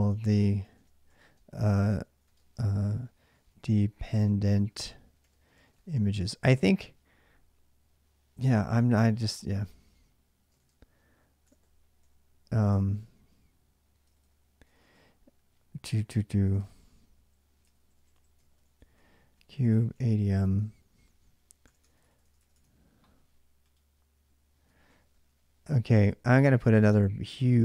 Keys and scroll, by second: 0.0-6.8 typing, 8.0-8.7 typing, 10.1-22.3 typing, 22.3 Return, 24.6-27.6 typing, 26.4 ctrl+j.